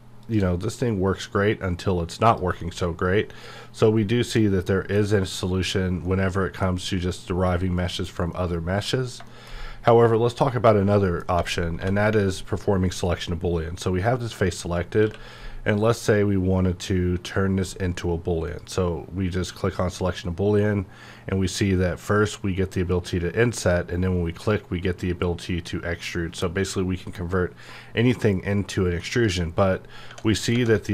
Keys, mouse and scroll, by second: 0.1 shift+click, 2.6-5.7 middle drag, 5.7-6.0 scroll down 1, 6.0 middle click, 6.2-6.7 scroll up 1, 6.7-7.0 scroll down 1, 7.8 click, 8.3 middle click, 9.6 scroll up 1, 10.9 middle click, 11.7 3, 12.1 click, 13.5 scroll up 1, 14.9 q, 18.4 q, 18.5 click, 23.5 click, 29.0 click, 29.1 click, 30.1 Tab, 30.2 middle click, 30.5 Tab.